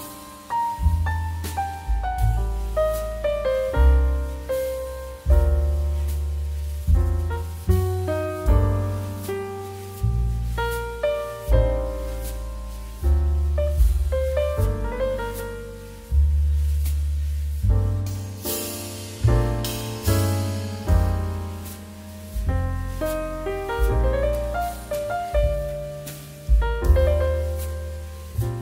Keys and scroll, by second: 17.0 2.